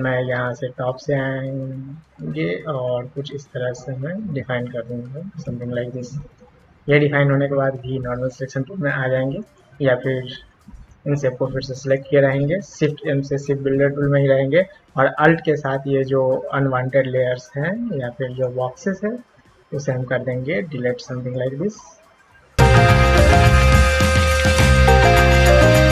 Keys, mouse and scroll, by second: 0.4-5.4 drag, 8.1 v, 9.4 click, 10.9-11.9 drag, 13.3 shift+m, 15.7-18.4 alt+drag, 19.4-21.3 alt+drag, 21.8-22.9 alt+drag, 23.2-23.7 alt+drag, 23.9 alt+drag, 24.2-24.6 alt+drag, 24.8 alt+drag, 25.1 alt+drag, 25.5-25.9 alt+drag.